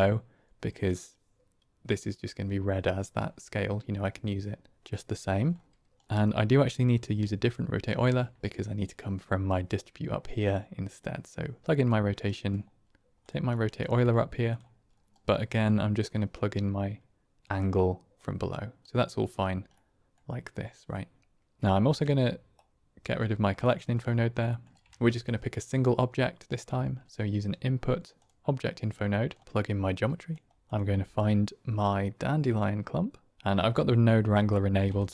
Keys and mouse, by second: 4.0 middle click, 4.8 middle click, 5.9 middle click, 7.7 ctrl+click, 7.8 ctrl+right click, 10.9 click, 12.3 middle click, 13.1 click, 13.7 shift+d, 15.2 middle click, 16.2-17.4 drag, 18.1 click, 19.7 middle click, 22.4 ctrl+right click, 23.7 middle click, 24.5 middle click, 24.8 shift+a, 29.4 click, 30.6-33.1 drag.